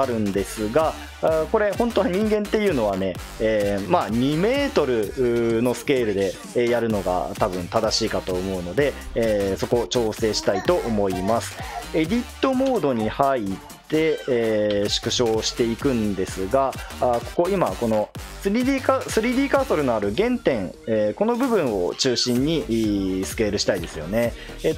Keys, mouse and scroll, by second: 12.7 Tab, 14.9 s, 23.8 ctrl+z.